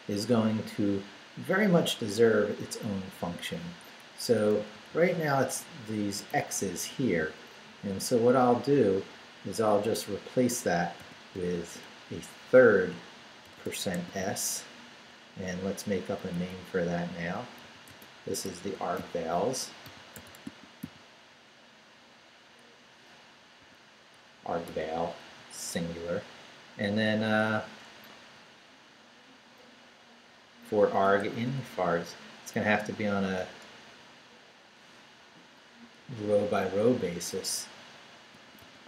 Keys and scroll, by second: 4.4 Right, 6.3 Right, 6.9 Left, 7.5 Up, 8.0 Down, 8.5 Right, 10.2 Left, 11.0 i, 11.3 BackSpace, 12.6 shift+BackSpace, 13.4 shift+5, 13.9 shift+s, 14.2 Right, 16.3 Right, 17.6-21.3 typing, 23.6 s, 24.6 BackSpace, 28.3 Return, 31.2 BackSpace, 32.9 Down, 33.9 Return, 36.4 Tab, 38.3-38.8 typing.